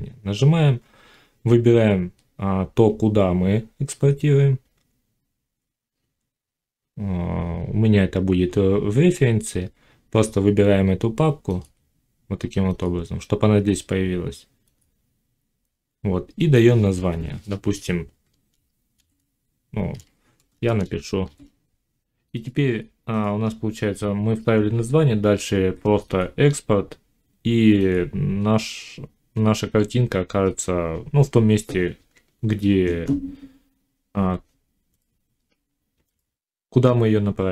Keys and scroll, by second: 18.8 shift+s, 20.2 BackSpace, 21.1 shift+s, 21.9 m, 35.9 F9.